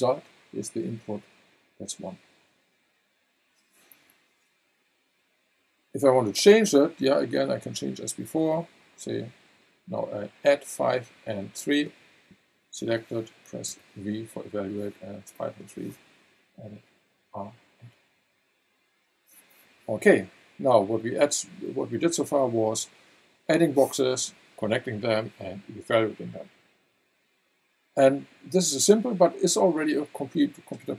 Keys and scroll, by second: 13.7 v.